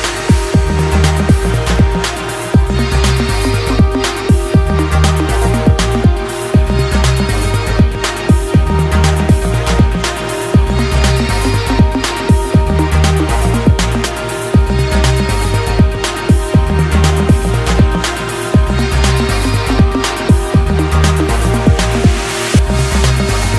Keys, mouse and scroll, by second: 1.3 shift+click, 3.6 shift+click, 3.9 shift+click, 6.5-9.6 drag, 15.5 ctrl+z, 17.9 click, 19.2-21.0 drag, 21.0-23.5 middle drag.